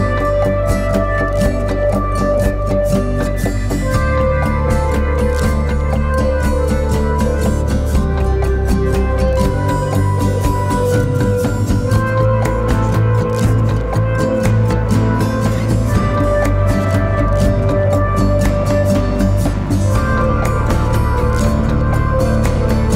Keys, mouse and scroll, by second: 4.3-6.5 drag, 10.8 click, 11.4 scroll up 1, 13.1 right click, 14.3 click, 14.3 click, 20.4 shift+click.